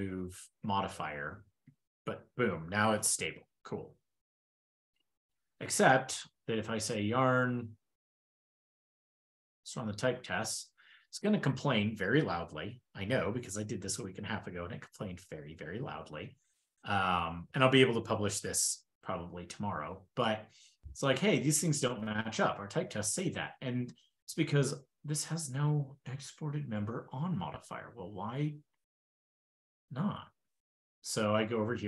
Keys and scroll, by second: 0.9 ctrl+shift+k, 1.1 ctrl+shift+k, 1.5 super+s, 3.5 super+w, 5.8 ctrl+super+Return, 8.8 ctrl+e.